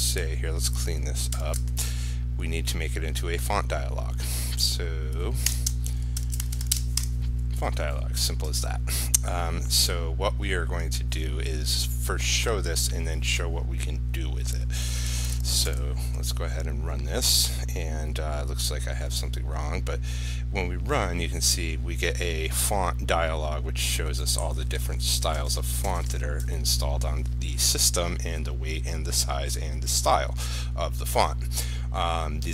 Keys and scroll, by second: 1.0 ctrl+a, 1.5 ctrl+i, 15.3 ctrl+s, 15.9 ctrl+r.